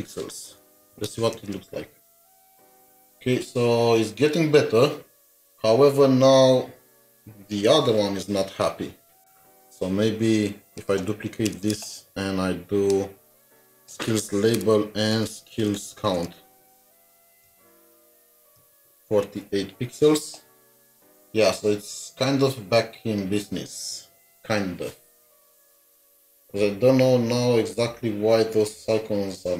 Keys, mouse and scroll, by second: 0.0-1.2 typing, 11.5 typing, 11.5 alt+shift+Down, 17.0-18.2 typing.